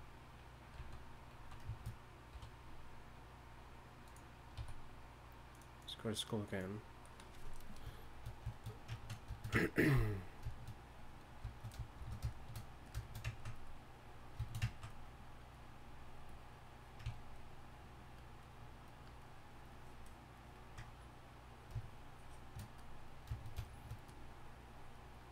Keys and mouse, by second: 1.3 z, 1.4 z, 2.3 1, 4.6 a, 10.5-12.9 drag, 12.0 shift+f.